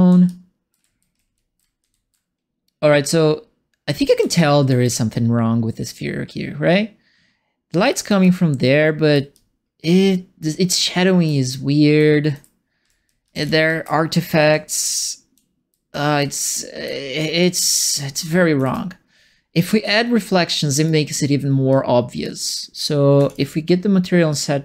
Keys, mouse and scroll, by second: 0.0-2.4 typing, 4.1 e, 4.6 e, 7.8 d, 8.2 d, 9.3 d, 10.7-19.0 typing, 19.8 click, 20.8 right click, 21.7 click, 22.7 click, 23.1 1, 23.2 click, 24.2 click.